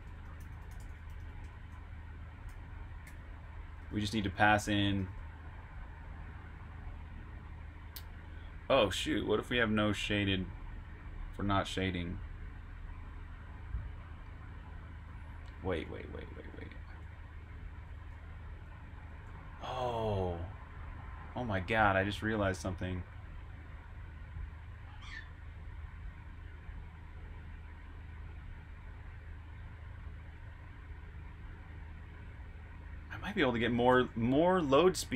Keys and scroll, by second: 0.0-4.9 typing, 15.7 Escape, 15.8-18.6 typing, 19.9-20.6 typing, 22.2-23.0 typing, 24.7 typing, 26.8-27.1 typing, 34.2-35.1 typing.